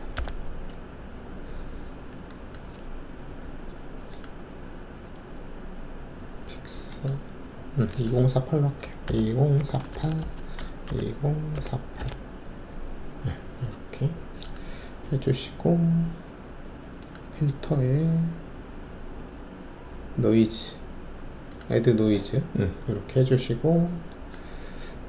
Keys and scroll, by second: 0.1 ctrl+alt+i, 8.8-12.0 typing, 10.2 Tab.